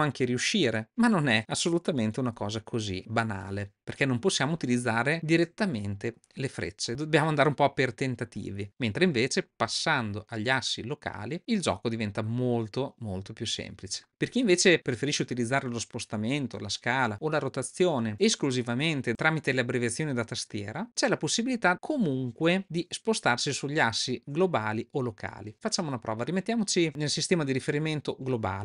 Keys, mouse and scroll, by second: 0.8-1.4 middle drag, 1.4 scroll down 1, 2.2 g, 3.2 scroll up 1, 3.3-3.8 middle drag, 6.2-6.7 drag, 9.8-11.2 drag, 11.4 middle click, 12.1-13.9 drag, 26.9-28.6 drag.